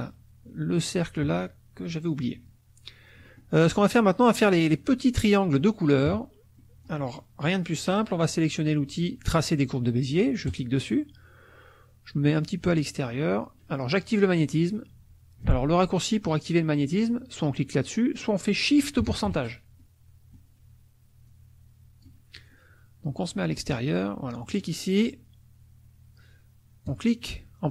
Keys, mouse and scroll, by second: 1.8 click, 1.8 middle click, 3.2 middle click, 3.5 click, 3.7 click, 6.1 KP_Subtract, 6.6 click, 10.5 click, 20.5 click, 20.9 click, 21.3 click, 24.5 click, 26.9 click.